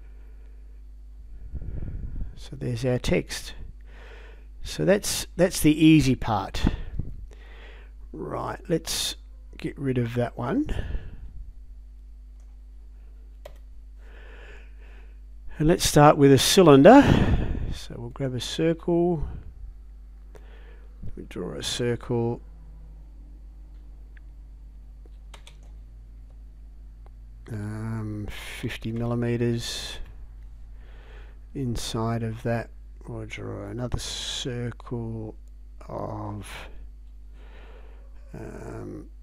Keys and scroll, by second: 25.3 space, 28.7 5, 29.9 Return.